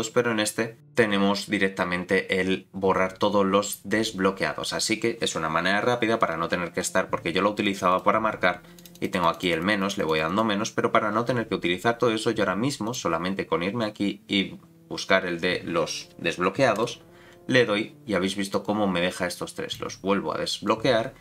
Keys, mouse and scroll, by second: 6.5-7.9 scroll up 14, 7.9 click, 8.8 click, 9.1 click, 9.3 click, 9.5 click, 9.7 click, 9.9 click, 12.8-16.8 drag, 19.7 click.